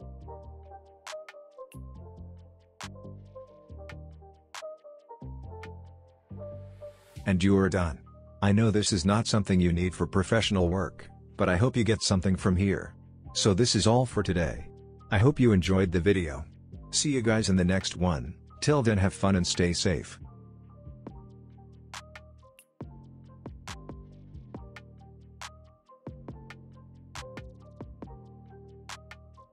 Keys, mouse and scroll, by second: 3.3 n, 4.4-5.0 drag, 7.1 space.